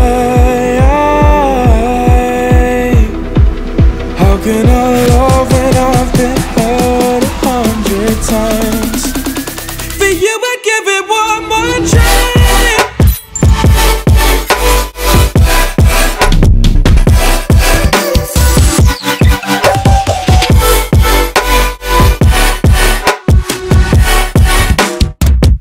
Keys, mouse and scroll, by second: 4.5 click, 6.3-9.3 drag, 10.1 click, 12.1-12.9 scroll down 5, 12.9-15.7 drag, 15.7-17.4 scroll up 6, 17.4-18.6 drag, 19.5 scroll up 1, 19.9-21.0 alt+drag, 21.0 Tab, 21.5 drag, 21.8 click, 22.1-23.5 right drag, 23.5-25.1 alt+drag.